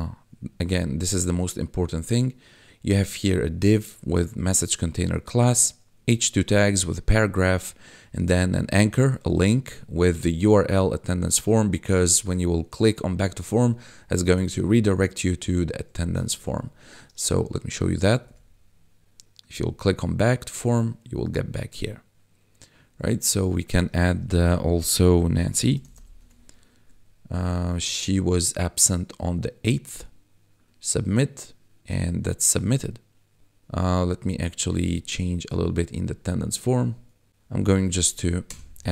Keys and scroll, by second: 0.6 1, 16.5 1, 18.3 Tab, 25.4 shift+n, 25.5 a, 26.1 Tab, 38.5 Return.